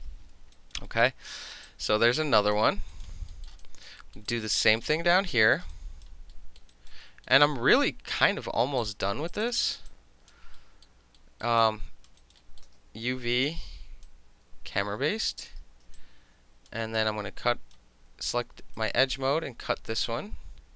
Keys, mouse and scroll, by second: 0.5 alt+click, 0.9 alt+middle click, 1.4 middle click, 1.6 click, 2.5 alt+middle click, 2.9 alt+right click, 3.0 alt+middle click, 3.4 alt+middle click, 3.6 alt+click, 4.0 alt+middle click, 4.3 alt+right click, 4.4 alt+middle click, 4.8 alt+middle click, 5.5 alt+middle click, 5.7 alt+right click, 6.0 alt+middle click, 6.3 alt+middle click, 6.3 alt+scroll, 6.7 alt+right click, 7.0 alt+middle click, 7.0 alt+scroll, 8.8 alt+click, 9.3 alt+shift+click, 9.4 shift+click, 9.9 alt+click, 10.5 alt+middle click, 11.2 alt+middle click, 11.6 alt+middle click, 11.6 alt+click, 12.1 alt+middle click, 12.2 alt+right click, 12.3 alt+middle click, 12.6-14.0 alt+middle drag, 12.8 space, 14.0-15.5 drag, 15.5-16.0 middle drag, 16.0 alt+click, 17.0-17.7 alt+right drag, 18.7 alt+click.